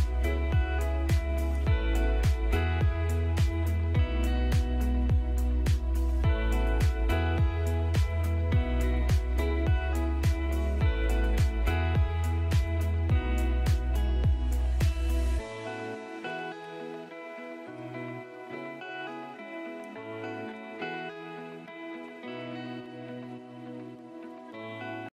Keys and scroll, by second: 1.3 ctrl+g, 3.1 ctrl+g, 4.2 ctrl+g, 6.4 alt+a, 11.8 F3, 13.9 F2, 17.7 ctrl+g, 18.1-18.9 typing, 19.2 Escape, 21.2 F3, 21.5 Escape, 22.6 shift+F2, 23.4 F9, 24.8 F9, 24.9 Escape.